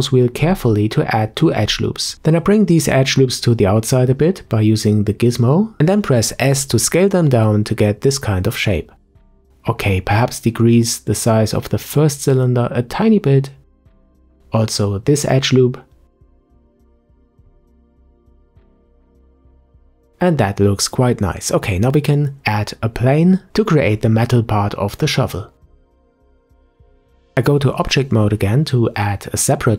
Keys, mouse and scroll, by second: 2.5 click, 4.8 s, 7.8-8.3 scroll up 1, 10.6 click, 11.1 s, 13.1 scroll down 2, 13.5-14.5 middle drag, 14.5 scroll up 5, 15.5 click, 15.9 s, 16.9 click, 18.0-18.3 scroll down 2, 18.3 Tab, 18.5-19.2 middle drag, 19.2 Tab, 19.5-20.3 scroll down 6, 20.3-21.9 middle drag, 21.9-22.3 scroll up 4, 24.0 Tab, 27.4 shift+a.